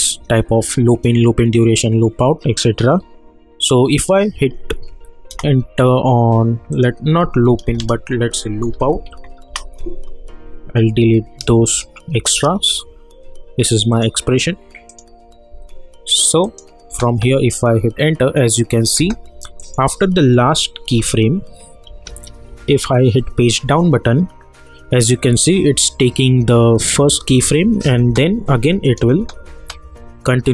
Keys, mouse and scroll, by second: 5.3 Return, 6.7 click, 8.5-9.5 typing, 10.9 Right, 13.9 click, 16.9 space, 19.6 click, 20.4-22.6 typing, 23.6 Page_Down, 25.1 -, 25.3 -, 25.5 -, 28.0 space.